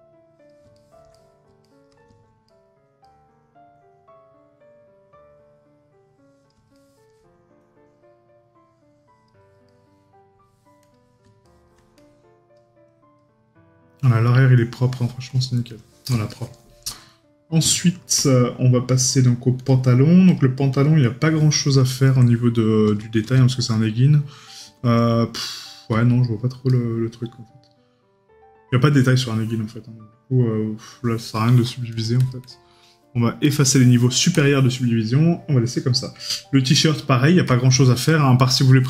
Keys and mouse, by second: 0.8 right click, 6.8 right click, 9.7 right click, 11.5 right click, 16.4 right click, 22.0 right click, 38.1 right click.